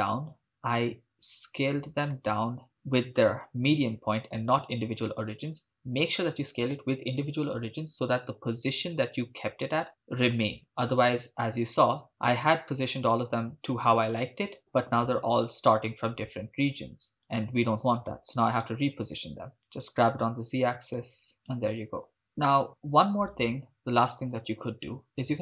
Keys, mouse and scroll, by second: 0.3-2.1 drag, 3.2-8.8 drag, 12.6-17.3 drag, 18.6 right click, 19.5 g, 19.5 z, 20.9 click, 21.3 shift+space, 22.1-24.4 drag.